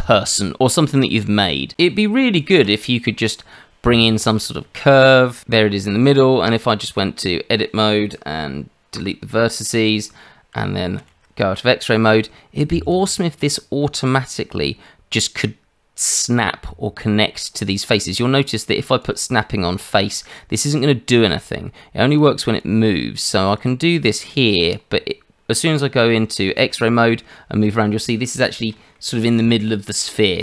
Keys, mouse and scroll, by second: 1.7 Tab, 2.5 shift+a, 6.4 Tab, 8.9 Delete, 11.0 shift+z, 12.8 click, 13.4 middle click, 19.0 click, 21.4 click, 23.6 click, 24.3 click, 26.5 shift+z, 27.0 scroll up 2, 27.3 middle click, 29.4 middle click.